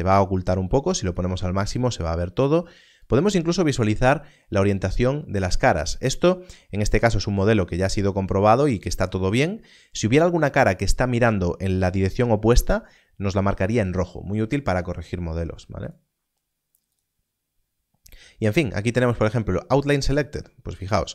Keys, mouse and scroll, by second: 15.8 click, 20.8 click.